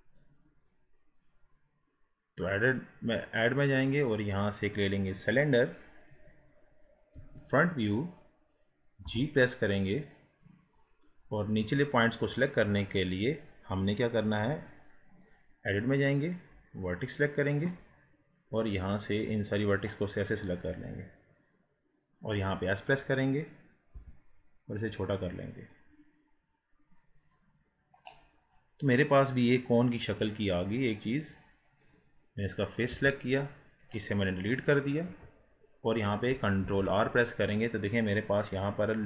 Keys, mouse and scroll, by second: 0.2-2.5 middle drag, 2.5-5.7 drag, 7.1 KP_1, 7.8 scroll down 1, 9.1 g, 10.4-12.3 scroll up 3, 12.3-14.7 middle drag, 14.7-18.3 drag, 18.3 scroll up 2, 19.0-21.9 drag, 23.9 s, 28.1 click, 28.5-31.3 middle drag, 31.3 click, 35.1 KP_1, 36.6 ctrl+r.